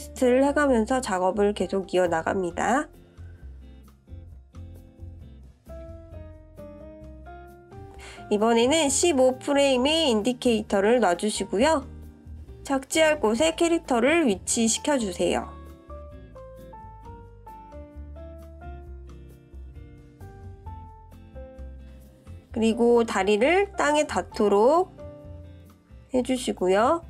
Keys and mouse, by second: 1.5-9.1 drag, 14.9-18.7 drag, 20.2-21.1 drag, 21.9-25.0 drag, 25.8 shift+drag, 25.9 shift+middle drag, 26.0 shift+click.